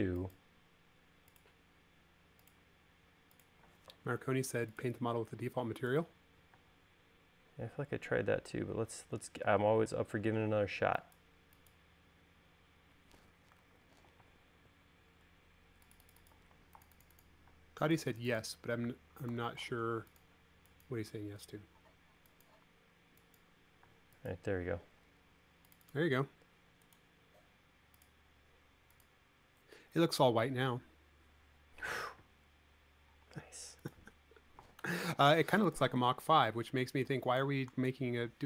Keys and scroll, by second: 7.4 space, 11.3 e, 14.4 super+z, 15.1 space, 18.4 space, 20.1 b, 24.7 space, 33.9 e, 35.6 super+z.